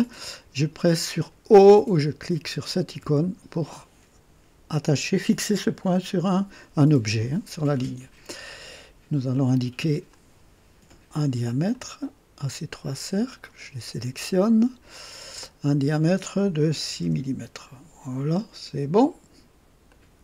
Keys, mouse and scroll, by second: 2.9 o, 10.1 click, 11.7 click, 13.2 click, 14.9 click, 16.7 KP_6, 17.0 KP_Enter, 17.0 Return, 19.9 click.